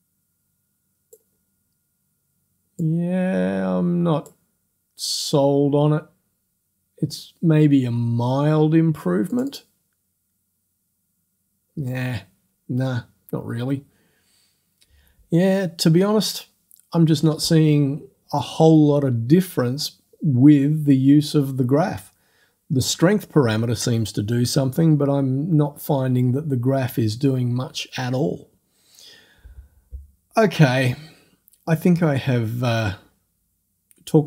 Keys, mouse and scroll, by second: 2.8-4.5 drag, 5.1 click, 5.8 click, 9.3 click.